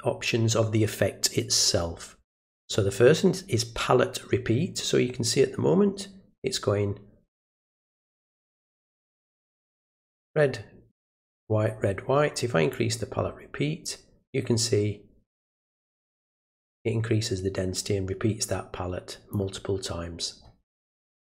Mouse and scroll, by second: 12.7-19.3 drag.